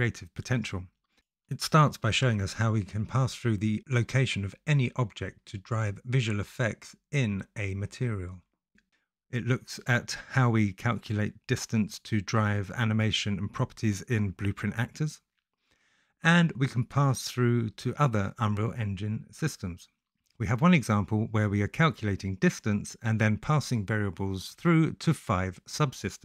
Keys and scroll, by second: 25.9 ctrl+e.